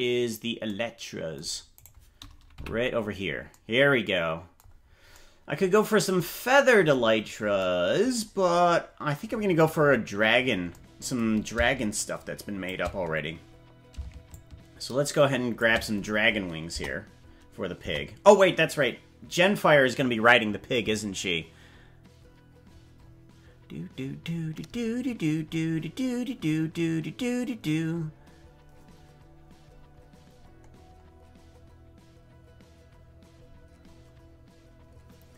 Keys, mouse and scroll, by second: 1.8 right click, 2.6 KP_Decimal, 4.8-5.2 scroll down 4, 7.2-7.6 scroll up 3, 10.0-10.8 scroll down 7, 11.9 shift+click, 13.0-13.8 scroll down 3, 14.3-15.6 shift+drag, 16.8 KP_0, 17.8 KP_0.